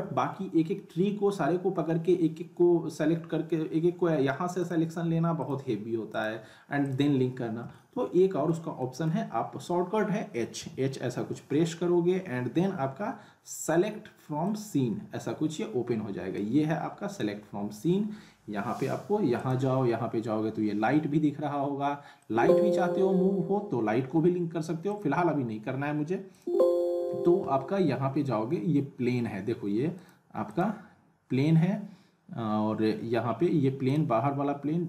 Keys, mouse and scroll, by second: 0.1 alt+middle click, 1.3-1.7 scroll up 1, 4.6 click, 7.4 scroll down 1, 7.7-8.6 alt+middle click, 10.5 h, 14.4-16.6 drag, 19.4 click, 22.2-22.8 middle drag, 24.9 click, 26.7-27.8 scroll down 1, 29.9 click, 33.9 click.